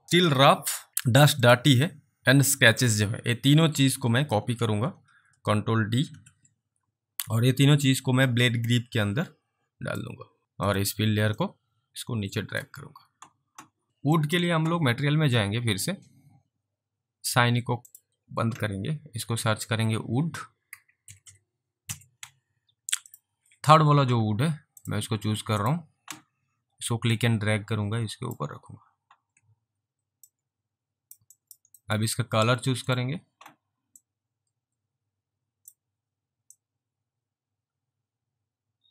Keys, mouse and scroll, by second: 0.3 click, 1.5 ctrl+click, 6.1 ctrl+d, 8.4 click, 10.7 click, 11.5 click, 13.9 alt+right click, 14.3 alt+click, 17.9 click, 20.5-22.4 typing, 23.1 click, 24.8 click, 27.2 click, 28.3 click, 30.3 click, 31.4 alt+click, 31.9 alt+middle click, 32.9 click, 34.1 click, 36.6 click.